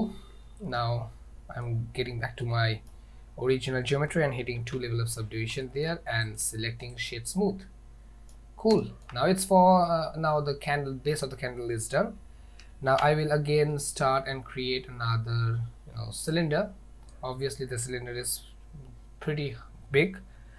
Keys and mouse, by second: 0.8-1.7 middle drag, 1.7 middle click, 2.5-3.0 middle drag, 4.8 ctrl+2, 5.7 shift+middle drag, 6.3 click, 7.7-8.4 middle drag, 8.9 shift+middle drag, 9.9-11.2 middle drag, 13.0 shift+a.